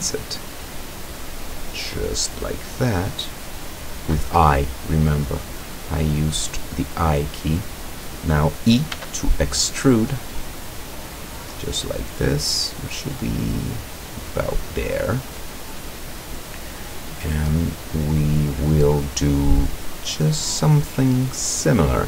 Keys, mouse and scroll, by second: 4.0 click, 5.3 right click, 5.8-7.1 middle drag, 9.0 e, 14.3 click, 16.3 middle click, 17.2 middle click, 17.8 middle click, 18.0 scroll up 1, 18.2-19.6 middle drag.